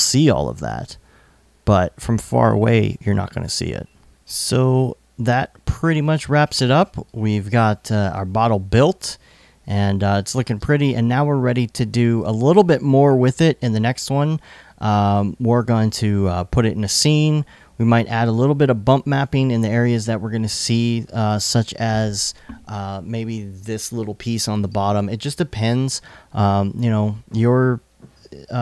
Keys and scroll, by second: 9.4 i.